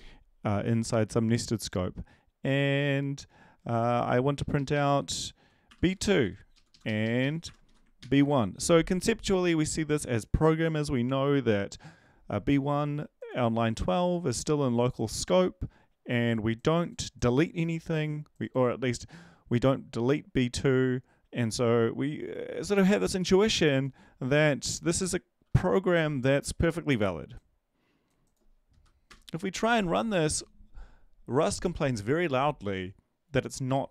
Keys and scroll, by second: 2.6 Tab, 3.6 ctrl+v, 4.3 Left, 4.7 Left, 5.0 Right, 5.7 2, 6.0 Down, 6.2 Down, 6.5 Left, 6.7 Left, 6.8 Left, 7.4 1, 7.6 Right, 8.0 ctrl+s, 28.7 Up.